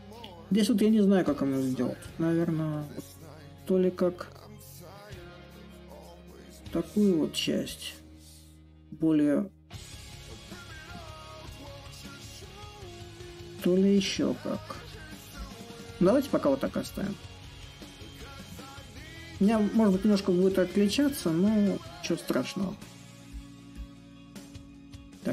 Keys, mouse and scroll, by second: 3.2-8.2 drag, 8.6-13.7 drag, 15.0-20.1 drag, 20.3-25.3 drag.